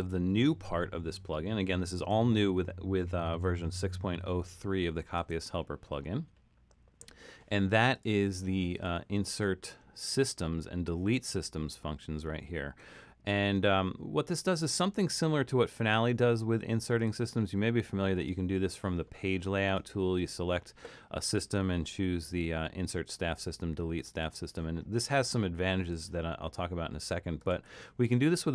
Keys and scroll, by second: 3.6 super+=, 4.2 super+=.